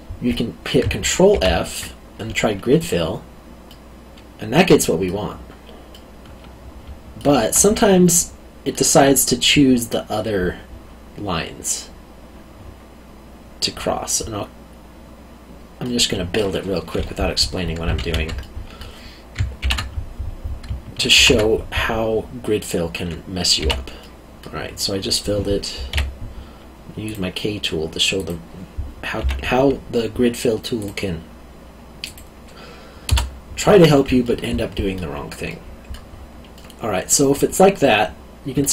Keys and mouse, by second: 1.3 ctrl+f, 2.8 click, 3.6 middle click, 5.9 middle click, 14.2 middle click, 18.0 ctrl+z, 18.4 middle click, 19.6 ctrl+f, 21.1 ctrl+f, 23.6 f, 24.0 middle click, 25.9 k, 27.0 click, 29.2 e, 30.8 click, 34.2 middle click.